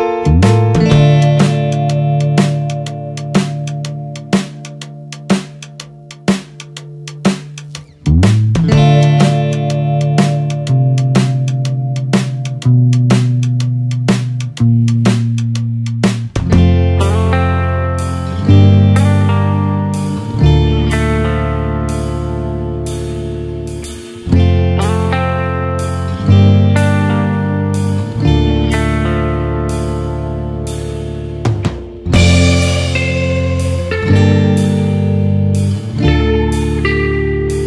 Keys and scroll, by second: 13.6 ctrl+-, 14.7 ctrl+space, 34.1 ctrl+-, 36.9 ctrl+0.